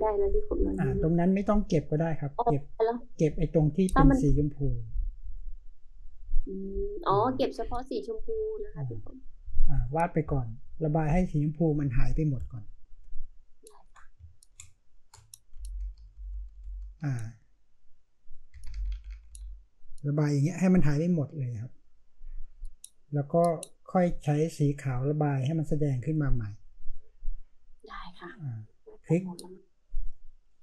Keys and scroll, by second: 13.0 space, 15.6-17.2 typing, 18.5-19.3 typing, 23.0-23.7 typing, 26.0-26.7 typing.